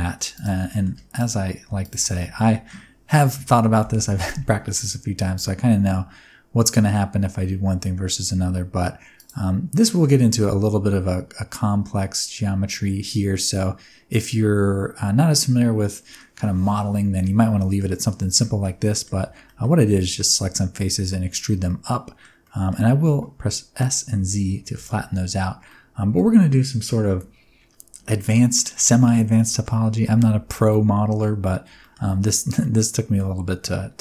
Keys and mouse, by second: 0.1 3, 0.3 click, 0.6 shift+middle click, 2.3 middle click, 3.4 e, 3.7 z, 5.3 z, 9.1 click, 9.8 middle click, 10.0 Tab, 10.3-16.1 middle drag, 17.3-17.7 middle drag, 18.3 middle click, 18.8 middle click, 19.1 Tab, 19.4 middle click, 21.5 middle click, 22.4 middle click, 23.0 s, 24.1 z, 24.6 KP_0, 24.6 KP_Enter, 25.7 middle click, 28.1 middle click, 29.3 middle click, 30.0 Tab, 30.4 middle click, 31.7 shift+middle click, 32.0 middle click, 32.5-33.1 middle drag.